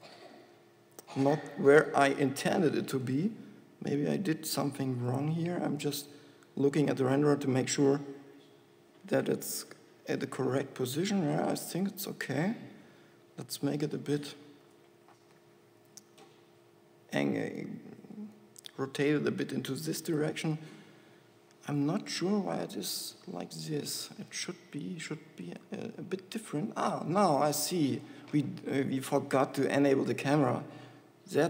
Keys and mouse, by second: 2.3 r, 13.1 r, 15.1 click, 15.4 z, 16.0 r, 20.4 g, 23.0 KP_0, 24.7 g, 27.9 g.